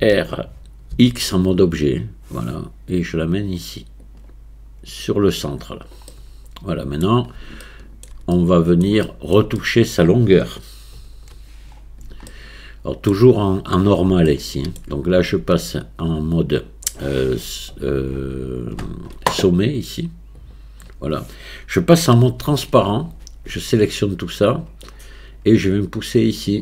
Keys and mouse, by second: 0.0 r, 6.1-7.0 middle drag, 7.6-8.1 shift+middle drag, 8.4 middle click, 9.1 shift+middle click, 9.6 middle click, 11.0 KP_1, 12.3-13.1 shift+drag, 14.3 shift+middle click, 14.6 click, 14.6 right click, 15.2 Tab, 20.4 click, 22.5 z, 24.0 click, 26.5 click.